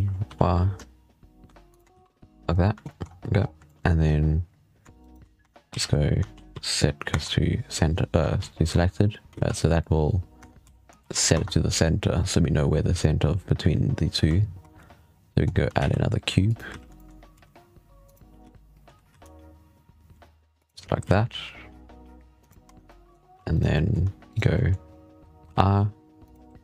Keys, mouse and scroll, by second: 1.8 z, 2.3-2.7 scroll down 4, 2.7 shift+middle drag, 2.9-3.2 scroll up 6, 3.2-3.5 scroll down 7, 3.5-4.0 shift+middle drag, 3.9 scroll up 2, 4.9 shift+right click, 5.3 Tab, 5.6 a, 6.2 shift+s, 7.0 Tab, 8.3 shift+s, 9.2 ctrl+z, 10.3 Tab, 10.5 a, 10.9 shift+s, 11.2 Tab, 15.0-15.4 scroll down 1, 15.4-15.7 scroll up 3, 15.7 shift+a, 16.6 z, 16.8 shift+middle drag, 17.0 scroll up 1, 17.2 s, 18.3 z, 18.7 g, 20.9 s, 22.5 Tab, 22.7-23.2 middle drag, 23.2 3, 23.4 right drag, 23.6-24.1 middle drag, 24.1 shift+right click, 24.4-25.3 middle drag.